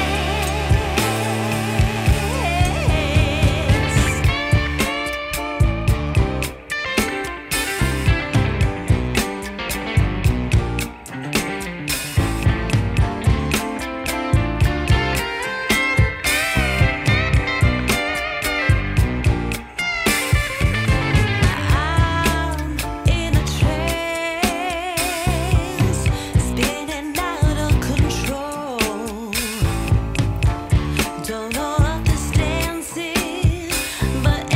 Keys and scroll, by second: 1.7 ctrl+r, 16.4 2, 26.2 F4, 27.1 F4.